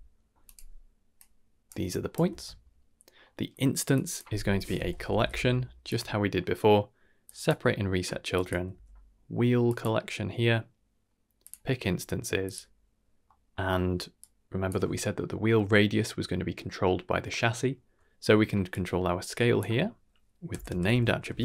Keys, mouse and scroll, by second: 1.2-1.7 drag, 1.9-2.3 ctrl+drag, 2.3 ctrl+x, 3.2 middle drag, 3.9-5.9 drag, 5.2 l, 6.3 middle click, 7.2 drag, 8.3-9.8 drag, 11.4 click, 12.4 click, 13.2 middle click, 14.1-14.6 drag, 17.7 middle click, 18.7 click, 19.6-21.4 drag.